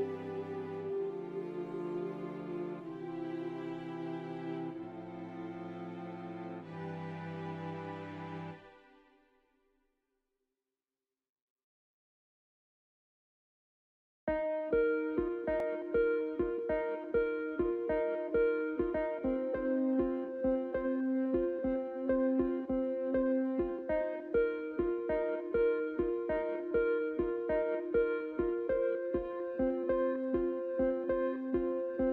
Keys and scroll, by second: 0.5 shift+s, 2.5 ctrl+z, 3.3 shift+s, 3.9 shift+s, 4.5 s, 8.5 F4, 19.0 s, 20.4 shift+s, 20.7 shift+s, 29.6 shift+s.